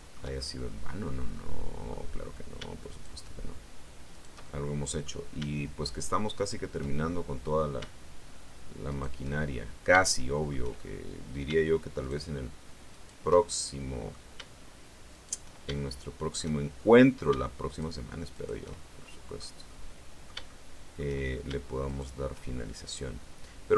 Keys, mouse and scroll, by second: 0.6 shift+middle click, 1.2 middle click, 2.8 shift+right click, 4.0 shift+right click, 4.3 shift+middle click, 6.3 shift+right click, 6.8 shift+middle click, 8.8 shift+right click, 9.3-10.6 shift+middle drag, 11.9 shift+right click, 12.8 shift+right click, 13.3 shift+middle click, 15.0 shift+right click, 15.6 shift+middle click, 16.6-16.9 shift+scroll up 3, 17.5 shift+right click, 18.2 shift+right click, 18.6 shift+middle click, 19.5-21.1 middle drag, 21.7 shift+right click, 22.8-23.7 middle drag.